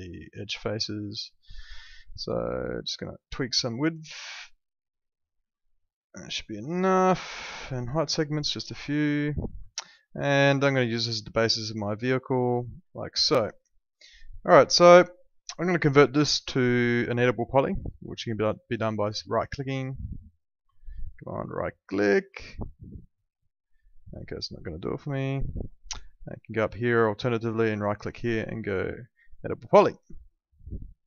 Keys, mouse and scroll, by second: 0.9 alt+middle click, 2.8 click, 8.2 click, 9.8 alt+middle click, 11.5 click, 13.0 alt+middle click, 14.2 middle click, 14.6 alt+middle click, 16.0 right click, 19.3 right click, 20.7 alt+middle click, 21.4 right click, 22.3 alt+middle click, 24.7 alt+middle click, 26.2 click, 27.6 right click, 29.3 click.